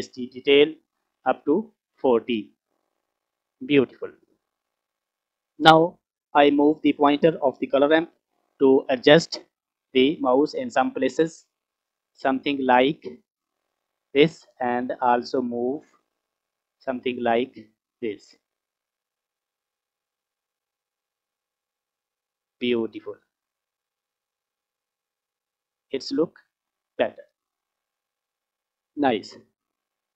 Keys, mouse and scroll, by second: 4.7 scroll down 4, 5.0 middle click, 5.6-6.2 scroll up 1, 6.2-7.5 scroll up 1, 10.8-13.4 drag, 15.0 click, 16.2 click, 16.7 click, 16.8 click, 18.7 click, 19.5 click, 23.5 click, 27.7 scroll down 1, 29.8 click.